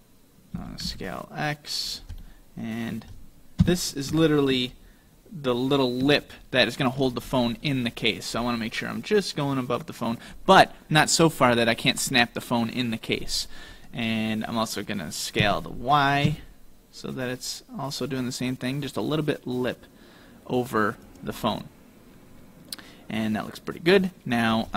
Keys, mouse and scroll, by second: 0.6 s, 2.3 middle click, 3.7 KP_7, 4.7-5.5 scroll down 5, 5.7-6.0 scroll up 2, 6.3 shift+middle click, 15.5 s, 21.5 middle click.